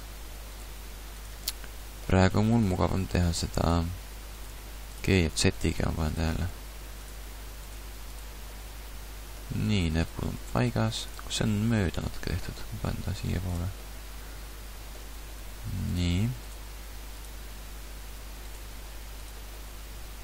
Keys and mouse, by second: 0.7 g, 1.5-4.3 drag, 2.7 g, 4.5 g, 5.7 g, 6.5 g, 7.8 g, 9.2 middle click, 10.4 g, 11.4 middle click, 12.6 g, 15.1 g, 15.3 click, 16.5 g, 19.3 g, 19.5 middle click, 20.0-20.2 middle drag.